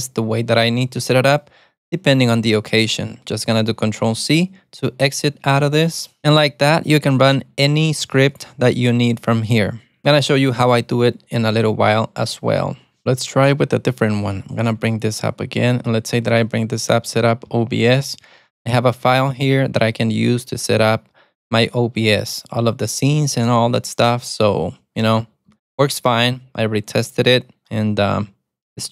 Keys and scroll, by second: 4.2 ctrl+c, 7.3 alt+super+a, 7.4 t, 14.8 alt+super+a, 15.0-16.4 typing, 17.6 Return, 25.6 Escape.